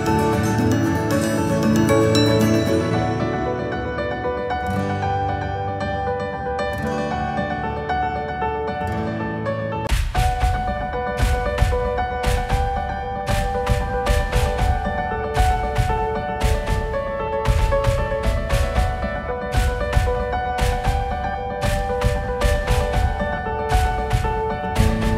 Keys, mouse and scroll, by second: 2.0 g, 5.2-5.6 scroll down 1, 5.6-6.5 scroll up 7, 6.5-7.2 scroll down 2, 7.2 s, 13.2 g, 16.2 KP_8, 16.6-18.8 KP_6, 19.1 KP_6, 21.5-24.8 drag, 24.8 KP_2.